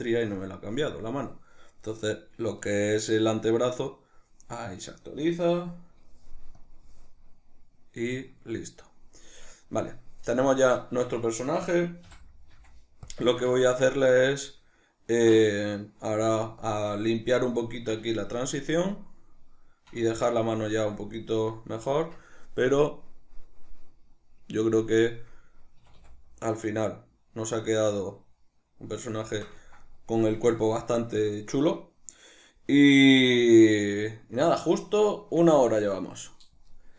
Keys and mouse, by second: 13.3-24.8 ctrl+shift+middle drag, 22.0 Tab, 24.8 click, 25.4-36.9 middle drag, 25.8 a.